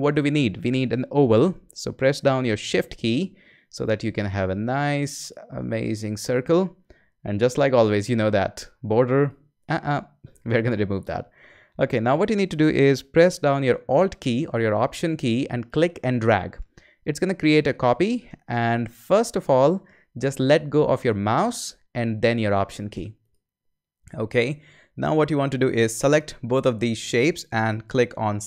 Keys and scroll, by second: 1.3 o.